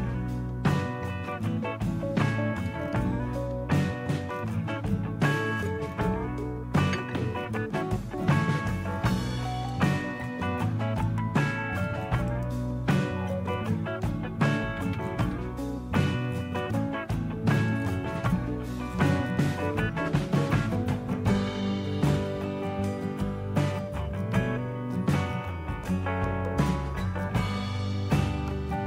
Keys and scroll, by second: 16.0-17.6 typing, 17.7 Return.